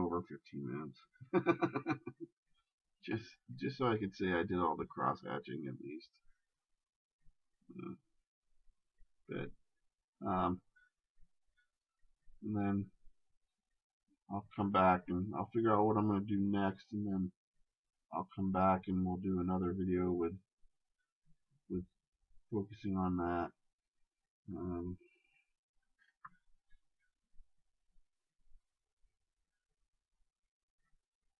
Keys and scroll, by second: 1.6 shift+space, 12.5 ctrl+z, 24.6 shift+space.